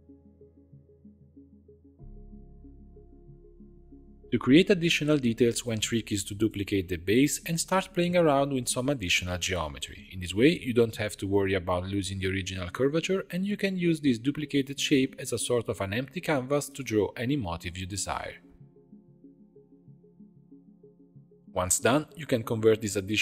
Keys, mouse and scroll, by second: 1.9 scroll up 2, 2.0 g, 3.8 shift+middle click, 4.1 shift+d, 6.6 ctrl+r, 7.1 ctrl+r, 7.5 ctrl+r, 8.0 ctrl+r, 8.5 ctrl+r, 9.1 ctrl+r, 9.7 ctrl+r, 10.0 ctrl+r, 10.3 shift+middle click, 10.5 scroll up 4, 10.8 click, 11.1 g, 11.8 click, 12.0 g, 12.5 ctrl+r, 13.0 shift+click, 13.1 right click, 13.7 scroll up 3, 13.9 click, 14.1 shift+click, 14.3 j, 14.6 click, 14.8 g, 15.8 scroll down 2, 15.9 shift+middle click, 16.3 scroll up 1, 16.6 click, 16.8 shift+click, 17.5 f, 17.7 shift+middle click, 17.9 ctrl+r, 18.3 click, 18.5 shift+click, 18.7 right click, 19.4 shift+click, 19.7 j, 19.8 scroll up 2, 20.1 click, 20.3 g, 21.4-22.3 drag.